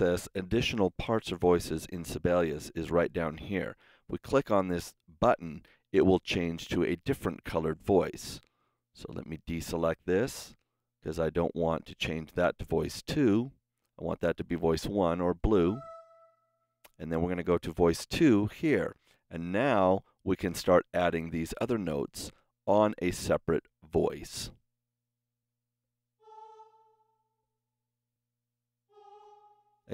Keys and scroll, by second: 26.0 KP_3, 27.8 KP_Decimal, 28.0 KP_2.